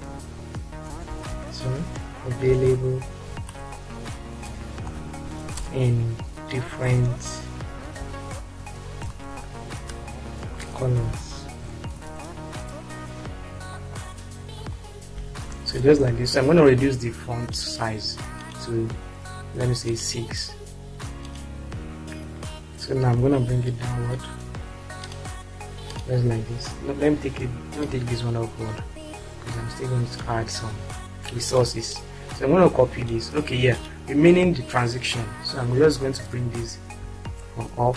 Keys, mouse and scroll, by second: 0.0-0.6 typing, 2.4-12.4 typing, 13.9 Left, 15.1 shift+o, 15.6 ctrl+space, 23.8 Down, 26.1 click, 27.8-30.3 ctrl+drag, 32.2 ctrl+click, 33.0 drag, 37.0 Up.